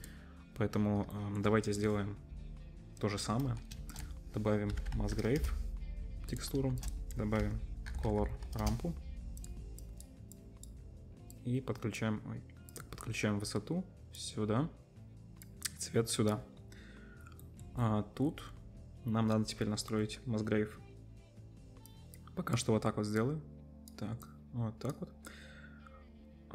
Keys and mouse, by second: 0.0-1.4 drag, 3.8 shift+a, 6.5-23.4 shift+drag, 6.7 shift+a.